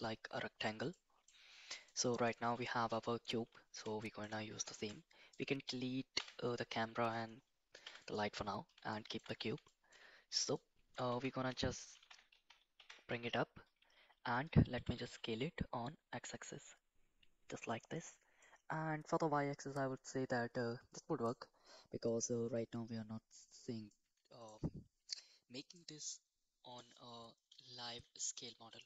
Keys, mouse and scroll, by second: 0.9-1.2 middle drag, 1.9 middle click, 2.8 KP_1, 4.0 shift+middle drag, 4.7 shift+middle drag, 5.3-5.7 drag, 6.1 x, 7.8 x, 8.9 shift+middle drag, 9.7 middle drag, 10.5-10.9 shift+middle drag, 11.1 Tab, 12.0 g, 13.1 Tab, 14.3 click, 14.7 s, 18.4-21.3 middle drag, 23.9-24.4 middle drag, 25.7-26.7 middle drag, 27.5 s.